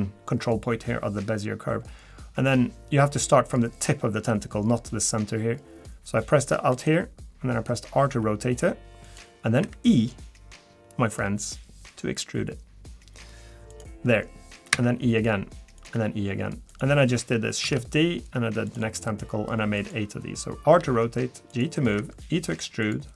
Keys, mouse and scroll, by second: 8.1 r, 9.6 e, 14.7 e, 15.9 e, 17.6 shift+d, 18.9 r, 20.8 g, 22.0 e.